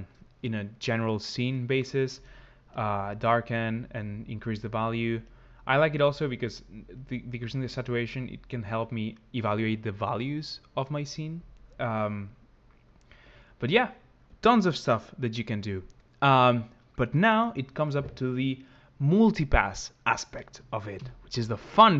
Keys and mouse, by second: 2.6 click, 5.0 click, 6.9 click, 11.6 click, 13.0 click, 20.8 ctrl+x.